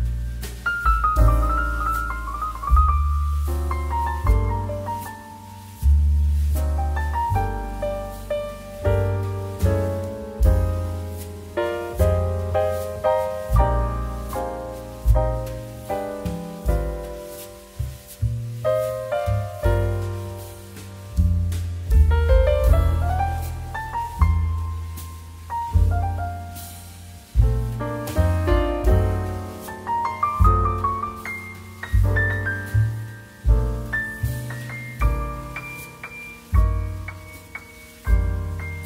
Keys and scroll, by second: 4.3 ctrl+z, 34.0 ctrl+z.